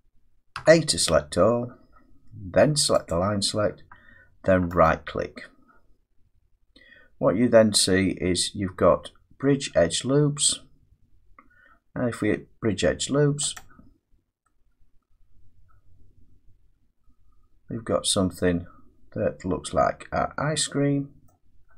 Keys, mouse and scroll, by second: 0.5 a, 3.1 click, 4.8 right click, 13.6-18.6 drag, 21.2 middle click, 21.6-21.7 scroll up 1.